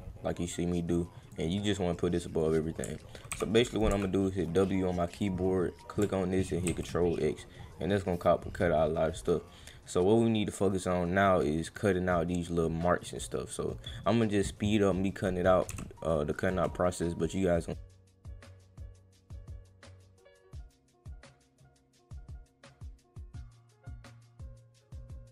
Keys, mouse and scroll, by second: 0.4 click, 1.9 click, 3.9 w, 5.1 click, 6.6 ctrl+x, 7.5-8.0 scroll up 4, 11.4 click, 16.4 click, 17.8 click, 17.9 click, 18.1 click, 18.2 click, 18.6 click, 18.7 click, 18.9 click, 19.2 click, 19.7 click, 19.9 click, 20.0 click, 20.3 click, 20.5 click, 20.6 click, 20.9 click, 21.1 click, 21.7 click, 21.7 click, 21.9 click, 22.4 click, 22.6 click, 22.8 click, 22.9 click, 23.0 click, 23.1 click, 23.1 ctrl+x, 23.4 click, 23.5 click, 23.8 click, 24.1 click, 24.3 click, 24.5 click, 24.7 click, 24.9 click, 25.2 click.